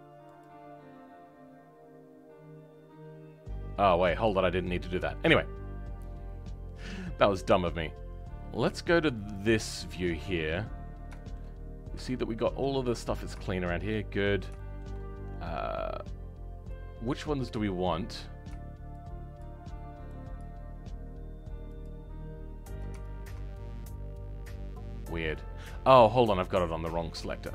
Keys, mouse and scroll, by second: 21.8 shift+click, 26.3-27.5 drag.